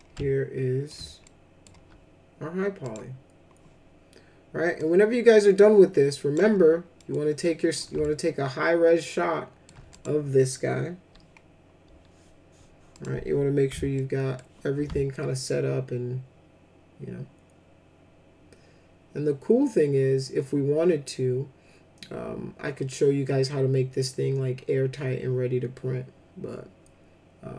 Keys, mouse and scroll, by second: 0.1 ctrl+alt+middle click, 1.2 alt+middle click, 2.8 click, 4.8-6.3 drag, 6.9 middle click, 7.4 middle click, 8.0-9.6 ctrl+alt+middle drag, 9.9 click, 12.9 click, 13.9 alt+shift+middle click, 15.1-27.5 alt+shift+middle drag.